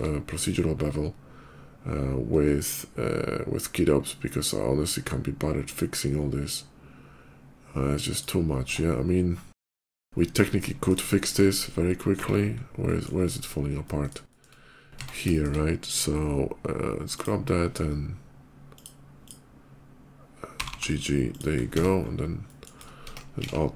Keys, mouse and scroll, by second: 0.0 click, 7.9 click, 8.6 Tab, 9.2 middle click, 9.6 middle click, 9.8 shift+middle click, 10.1 shift+middle click, 10.2 shift+middle click, 10.4 shift+middle click, 10.9 shift+middle click, 12.0 Tab, 12.5 middle click, 13.6 middle click, 14.0 shift+middle click, 14.4 middle click, 14.5 shift+middle click, 14.7 Tab, 15.1 shift+middle click, 15.2 shift+Tab, 16.9 shift+click, 18.6 click, 19.0 click, 20.5 g, 20.6 g, 21.1 click, 21.5 Tab, 21.5 middle click, 22.3 middle click, 22.6 middle click, 23.3 alt+x.